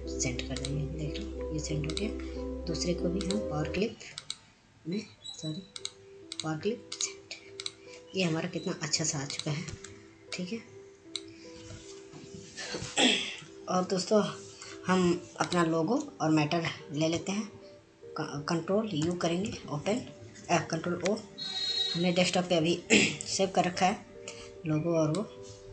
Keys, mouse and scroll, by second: 2.5 click, 13.5 click, 13.9-16.8 drag, 19.2 click, 22.9 ctrl+o.